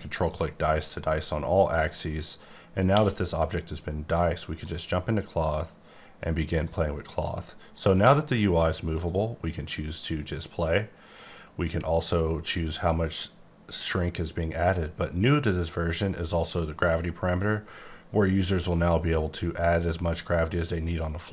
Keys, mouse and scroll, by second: 0.1-1.3 scroll up 20, 1.7 click, 2.9 q, 4.7 click, 6.6 click, 8.9 click, 11.6-12.0 scroll up 5, 12.0-13.1 scroll down 10, 13.1-13.7 scroll down 2, 14.7-16.5 scroll down 22, 16.8-18.4 scroll up 15, 18.8 scroll up 4, 19.0 scroll down 1, 19.3-20.6 scroll up 19.